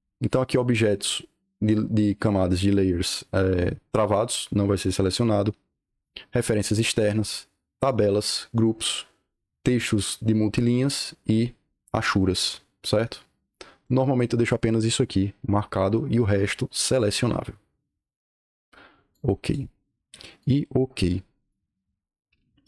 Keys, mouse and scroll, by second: 19.0 click, 19.6-20.3 scroll up 2, 20.3-21.4 drag, 21.8 scroll down 2, 22.2-22.5 scroll up 2.